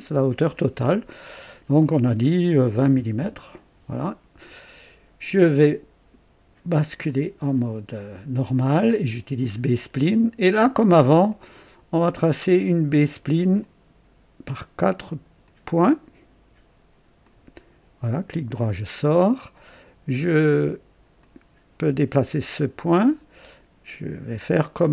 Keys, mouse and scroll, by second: 1.2 click, 2.7 KP_2, 2.9 KP_0, 3.2 KP_Enter, 6.8 click, 9.4 click, 11.2 click, 13.6 click, 15.4 click, 17.2 click, 18.3 right click, 19.1 right click, 21.2-22.5 drag, 22.6 click.